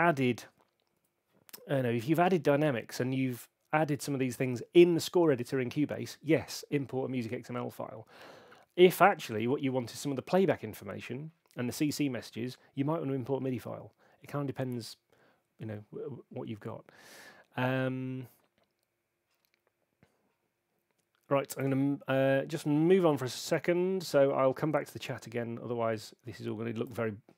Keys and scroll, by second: 1.0 Home.